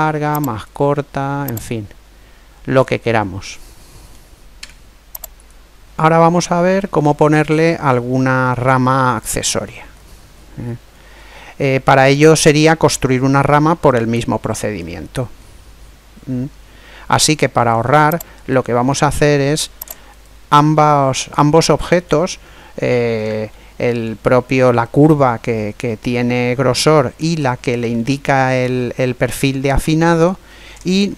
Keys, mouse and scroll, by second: 0.4 click, 2.0 click, 2.0 right click, 3.1-4.8 middle drag, 4.4 Tab, 6.1-8.1 middle drag, 9.4-12.5 middle drag, 15.2-17.0 middle drag, 18.1-21.7 right drag, 20.5 middle click, 21.2-22.5 middle drag, 23.3-26.7 middle drag, 27.8-29.6 middle drag, 30.7 shift+d.